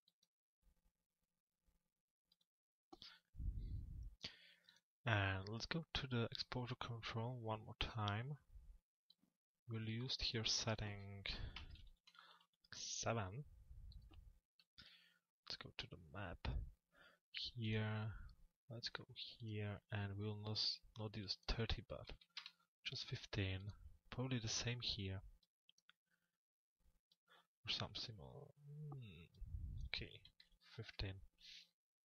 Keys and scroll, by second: 14.3 m, 22.0 Return.